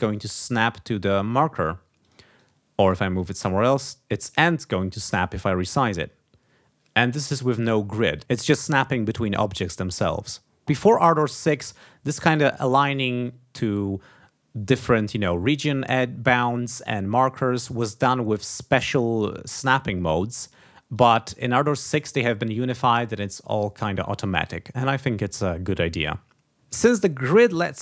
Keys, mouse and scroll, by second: 0.1 ctrl+click, 1.5 ctrl+scroll down 2, 2.0 ctrl+click, 2.3 ctrl+click, 3.1 click, 3.8-4.9 drag, 5.3 ctrl+scroll up 2, 18.7 click, 20.9 click.